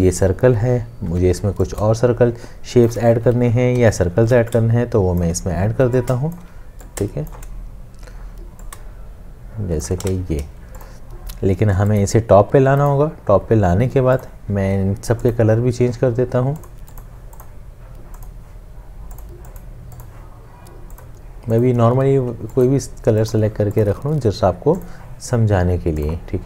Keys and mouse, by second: 1.1 m, 2.0 shift+click, 3.8 l, 4.7 shift+click, 6.1 shift+click, 8.8 shift+click, 10.2 v, 12.9 right click.